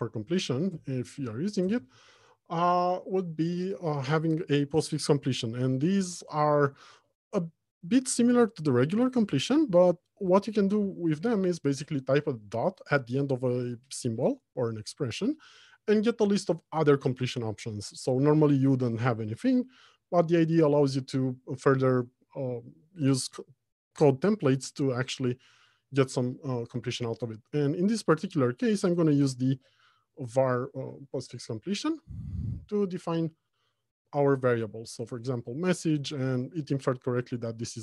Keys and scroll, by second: 0.2 Return, 30.7 Return.